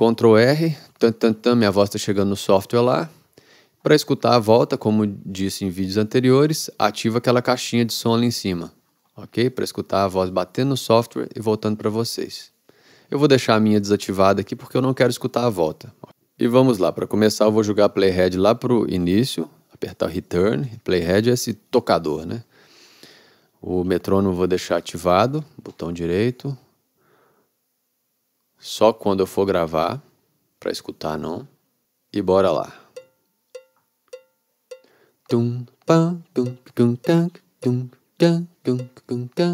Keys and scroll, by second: 0.7 ctrl+r, 33.0 r.